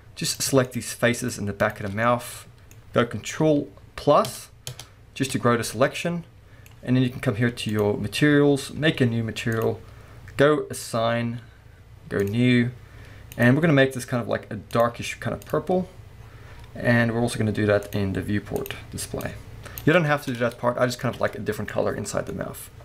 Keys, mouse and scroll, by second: 0.3 click, 0.6 shift+click, 1.2 shift+click, 1.6 shift+click, 2.0-4.2 middle drag, 4.2 ctrl+KP_Add, 5.9-7.7 middle drag, 7.7 click, 8.5-9.5 scroll up 1, 9.5-12.6 drag, 13.3 click, 16.2-16.5 scroll down 1, 17.8 click, 19.9 scroll down 1, 20.2 Tab, 20.4-22.8 middle drag, 21.0 alt+a, 21.7-22.3 scroll down 2.